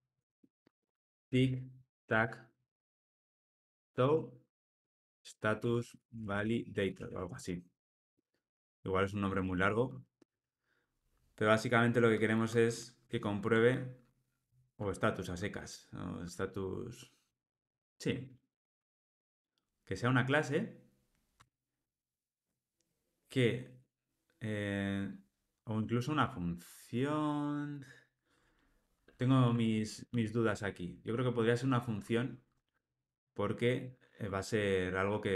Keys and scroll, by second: 14.4 alt+shift+Left, 29.6 alt+shift+Left, 32.7 alt+shift+Right.